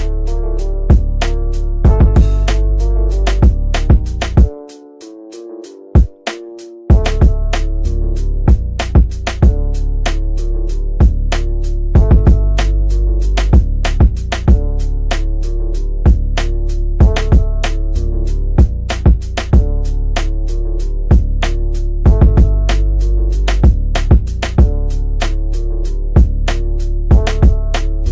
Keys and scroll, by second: 10.1 shift+Home, 10.9-11.6 typing, 12.6 ctrl+z, 18.7 F3, 23.6 F9.